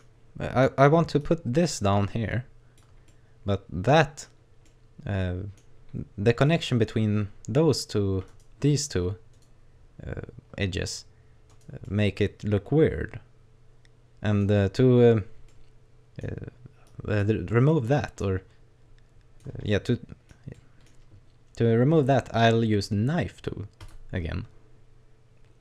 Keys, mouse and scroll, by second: 0.1-0.6 scroll down 3, 1.2 click, 3.1 middle click, 4.7 middle click, 6.0-6.5 scroll down 1, 6.5 middle click, 8.3 right click, 9.3 right click, 11.5 right click, 11.8 middle click, 14.4-14.9 scroll up 3, 15.5 middle click, 16.9 click, 17.5 middle click, 18.2 click, 19.7 middle click, 20.5 middle click, 23.9 click.